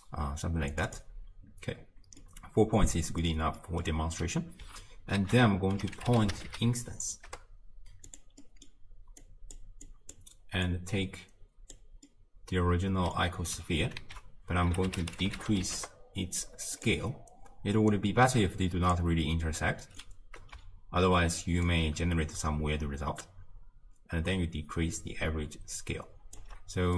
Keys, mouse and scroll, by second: 1.8-2.3 scroll up 1, 2.3-7.3 middle drag, 7.3 ctrl+a, 9.2-11.8 drag, 15.8 s, 19.0 click, 19.5-21.9 middle drag, 21.9-25.9 shift+drag.